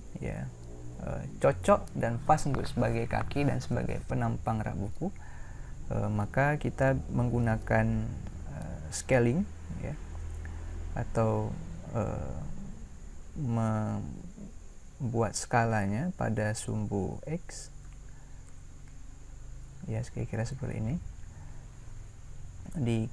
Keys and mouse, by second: 17.8 s.